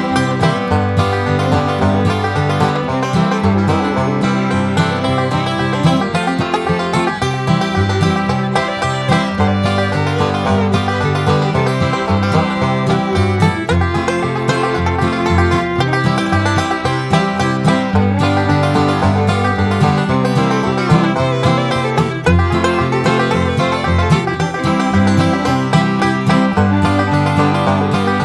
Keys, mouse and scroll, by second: 0.6 scroll down 2, 1.2-1.6 scroll up 2, 2.1 scroll down 2, 2.5 scroll up 2, 3.7-4.0 scroll up 1, 4.4 scroll down 1, 5.5 scroll down 2, 6.2 scroll up 2, 7.3-8.1 scroll down 4, 8.6 scroll up 2, 9.1 scroll down 2, 9.9-11.5 drag, 11.5 1, 12.1 2, 13.0 scroll down 2, 13.4 3, 14.2-14.5 scroll up 2, 15.3 4, 15.9-16.2 scroll down 2, 16.5 scroll up 2, 17.7 5, 18.4 scroll down 2, 19.0 scroll up 2, 19.5 6, 20.1 scroll down 2, 20.7 scroll up 2, 22.1 0, 22.7-23.0 scroll down 2, 23.2 scroll up 2, 23.9 scroll up 2, 24.6 scroll down 2, 27.6 click.